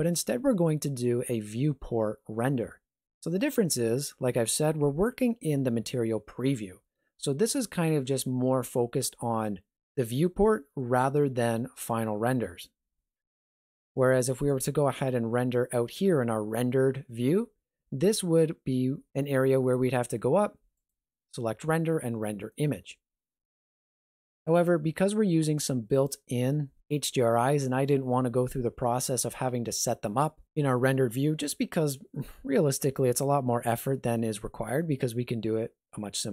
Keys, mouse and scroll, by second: 14.5 click, 20.8 click, 24.5 click.